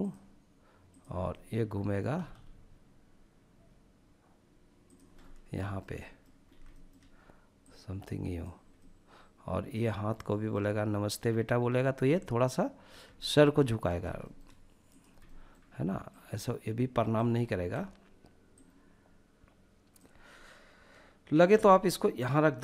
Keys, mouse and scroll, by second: 0.3-1.0 middle drag, 1.1 r, 1.3 r, 3.9 drag, 4.1 scroll down 1, 4.6 shift+middle click, 4.9 middle click, 5.4 scroll up 1, 5.7-6.6 shift+middle drag, 6.6 click, 7.7-9.5 middle drag, 11.1-11.9 middle drag, 12.1 shift+middle drag, 12.6 middle click, 12.9 scroll up 1, 13.2 shift+middle drag, 13.9 drag, 14.2 middle click, 15.0 click, 16.6 ctrl+z, 17.5 click, 20.5 g, 22.0 click.